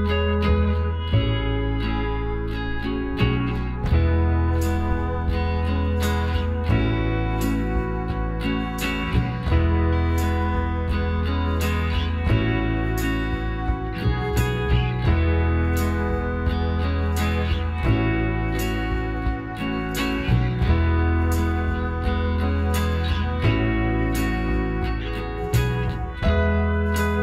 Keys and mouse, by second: 0.4 x, 1.5 middle click, 3.3 Tab, 4.0 a, 9.0 KP_Divide, 9.6-11.8 middle drag, 10.0 z, 13.0 a, 13.3-15.1 middle drag, 20.1 KP_1, 22.9-24.3 drag, 24.3 shift+a.